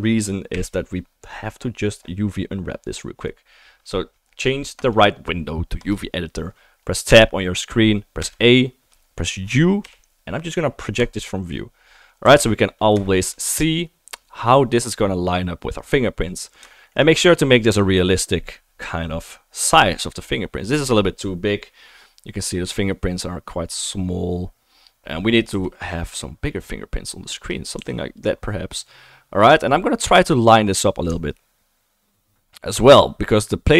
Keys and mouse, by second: 0.5 KP_7, 7.1 Tab, 8.2 a, 9.8 u, 12.3 a, 25.8 s, 27.0 click, 27.0 middle click, 27.0 right click, 27.4 click, 27.4 right drag, 27.6 click, 28.2-33.7 right drag, 28.2 r, 30.2 r.